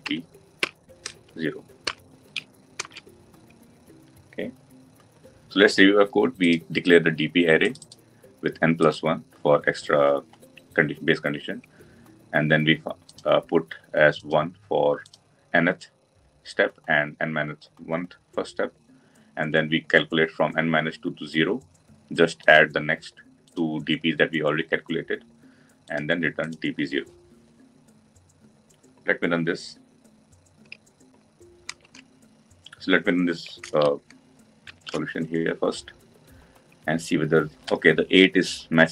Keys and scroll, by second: 2.6 ctrl+alt+l, 34.6 ctrl+shift+F10.